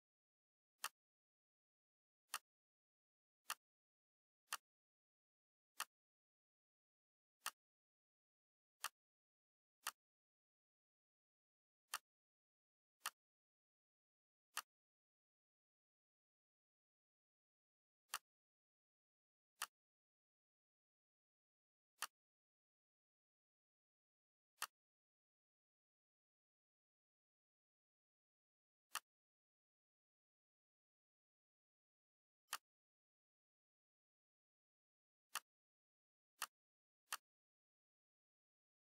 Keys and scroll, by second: 27.5 ctrl+shift+c, 30.7 ctrl+shift+v.